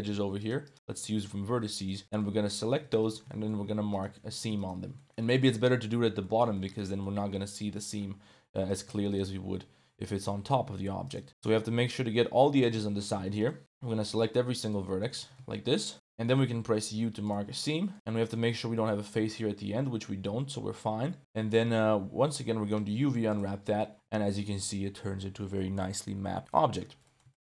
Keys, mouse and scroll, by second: 0.4 click, 0.6 shift+click, 0.8 ctrl+shift+click, 1.8 ctrl+shift+click, 2.0 shift+middle click, 3.0 ctrl+shift+click, 3.3 shift+middle click, 3.9 shift+click, 4.4 ctrl+z, 4.6 shift+click, 4.9 middle click, 5.2 middle click, 5.7 middle click, 6.2 click, 6.6 shift+click, 7.4 click, 7.8 shift+click, 8.6 right click, 9.1 ctrl+shift+click, 10.1 middle click, 11.0 shift+right click, 11.3 shift+middle click, 12.5 middle click, 13.4 ctrl+shift+click, 14.1 shift+click, 14.6 shift+click, 14.8 middle click, 15.2 ctrl+z, 15.5 shift+click, 15.8 middle click, 16.0 click, 16.6 u, 17.6 click, 17.9 1, 18.1 click, 18.8 click, 19.0 z, 19.6 z, 21.6 click, 22.1 a, 22.6 u, 24.1 Tab, 24.3-25.3 drag, 25.3 middle click, 26.5 middle drag, 27.0 middle drag, 27.3 shift+middle click.